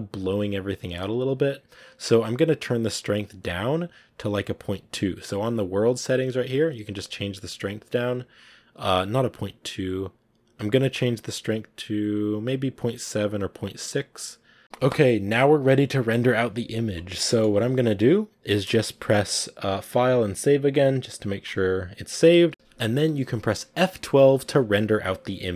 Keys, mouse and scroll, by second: 2.0 scroll down 3, 3.6-6.4 drag, 6.9 scroll up 2, 9.0-14.6 drag, 14.6 ctrl+s, 17.2 shift+middle click, 17.5 ctrl+s, 22.5 KP_0, 24.1 z.